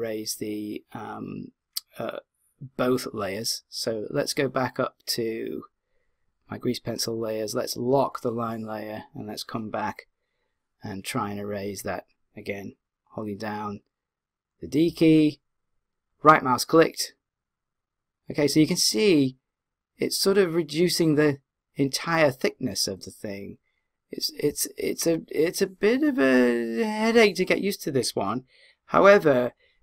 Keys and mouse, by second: 5.0 click, 7.8 click, 14.9-16.0 d, 16.2-18.0 right drag, 16.2 d.